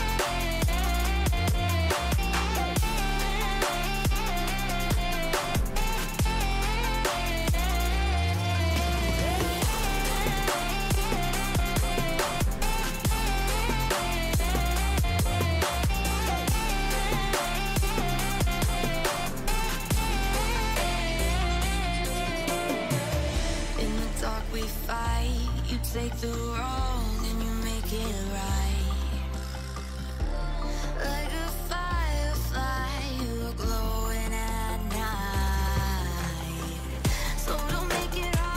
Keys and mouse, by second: 0.8 b, 1.4 b, 5.5 b, 6.1-10.5 b, 11.9 b, 12.9 middle click, 12.9 b, 13.9 z, 14.1 z, 15.3 Delete, 16.5 click, 17.1 Delete, 18.2 drag, 18.3 middle click, 18.5-21.1 typing, 19.3 Tab, 19.5 right click, 20.3 Tab, 23.7-27.7 middle drag, 27.7 z, 27.8 a, 28.0 a, 32.3-36.5 typing, 38.2 a.